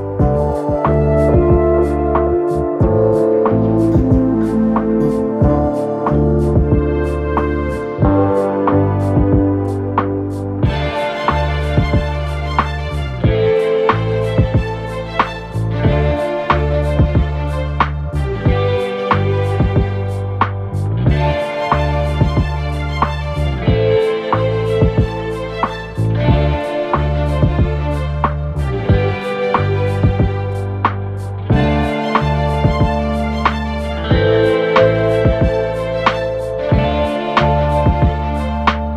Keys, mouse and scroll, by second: 24.0 Delete, 27.2 Left, 27.8 ctrl+-, 35.7 shift+click.